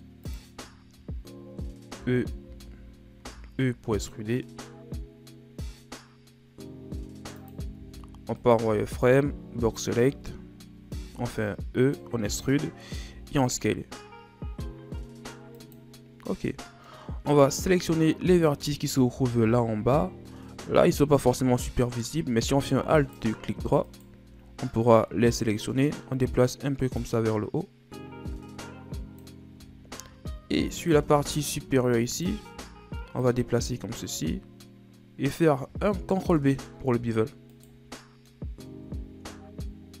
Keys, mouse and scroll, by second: 0.7-1.2 scroll up 2, 2.0 z, 2.5 z, 3.2 e, 7.7 z, 8.4 right click, 8.7 b, 10.1 z, 11.0 e, 13.0 s, 16.2 scroll down 2, 16.4 middle click, 17.0-19.5 scroll up 4, 19.5 KP_1, 23.0 alt+right click, 23.9 alt+right click, 25.0-28.0 drag, 29.8 scroll up 3, 30.2 z, 30.8 right click, 31.0 b, 32.6 z, 33.2-36.3 drag, 36.3 ctrl+b, 37.8 scroll down 2, 38.0 middle click, 38.4-39.9 scroll up 6, 39.9-40.0 scroll down 2.